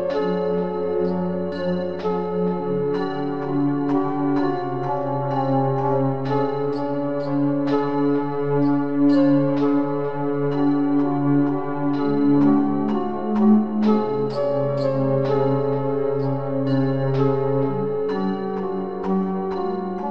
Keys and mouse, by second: 2.4 KP_1, 4.3-7.1 right drag, 7.1 middle click, 7.5-8.5 drag, 8.5-10.9 middle drag, 10.9 b, 11.4-13.1 drag, 14.5 a, 16.3-18.8 typing.